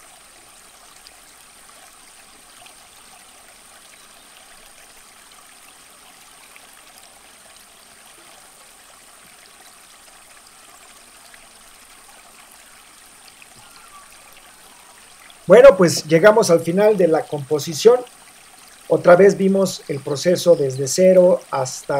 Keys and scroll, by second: 1.8 BackSpace, 3.6 super+-, 5.9 v, 13.0 super+0.